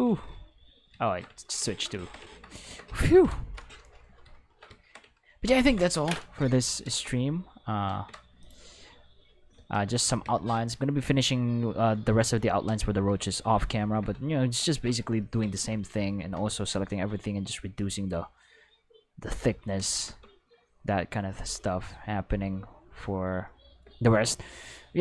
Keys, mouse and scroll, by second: 0.3 click, 2.3 ctrl+middle click, 3.4 Home, 5.6 ctrl+s, 7.9 ctrl+Tab, 8.4 click, 9.5 alt+a, 15.6 Tab, 16.2 a, 16.7 alt+s, 19.3 click, 19.8 alt+a, 20.0 Tab, 24.3 middle drag.